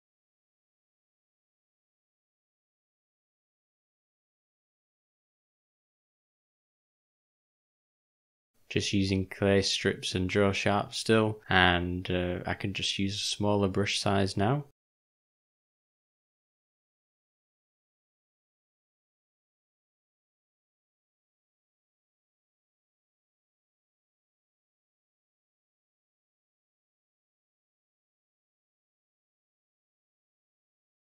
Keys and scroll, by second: 8.5 [, 8.7 [, 8.8 [, 15.6 ].